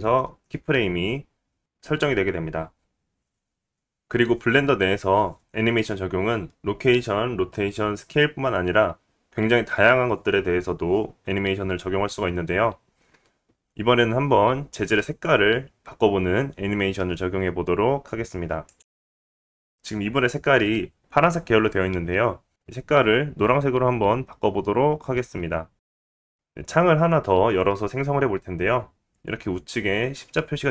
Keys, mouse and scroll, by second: 18.7 click, 19.3 click, 19.7-25.0 right drag, 24.4 ctrl+z, 25.0-30.7 drag.